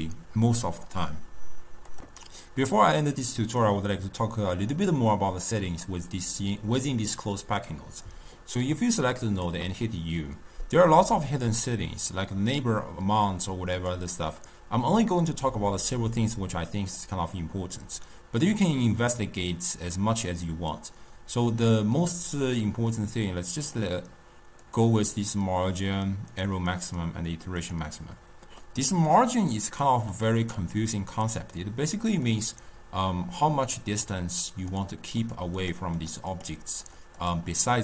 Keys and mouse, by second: 2.4-5.9 middle drag, 5.9-8.9 drag, 9.0 click, 9.7 u, 28.7-31.7 middle drag, 32.3-35.4 drag, 35.6 click, 36.0 click, 36.4 click, 36.9 click, 37.2 click.